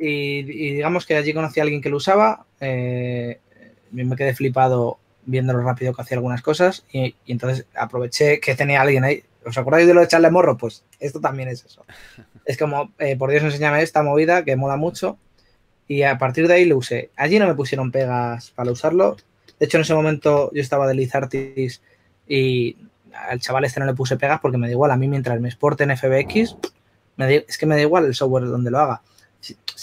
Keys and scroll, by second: 20.0 s, 23.0-24.1 typing.